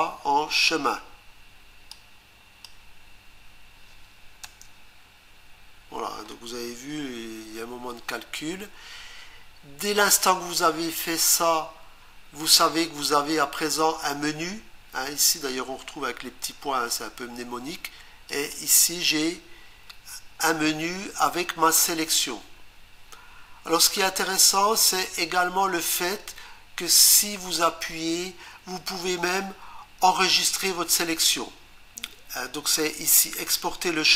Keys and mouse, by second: 1.9 click, 4.4 Return, 18.3 click, 27.6 right click.